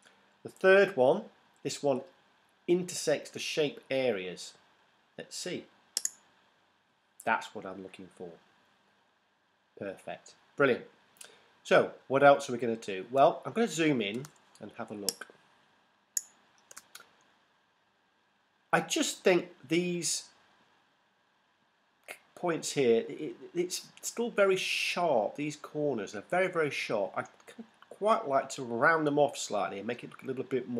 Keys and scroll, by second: 14.4 super+space.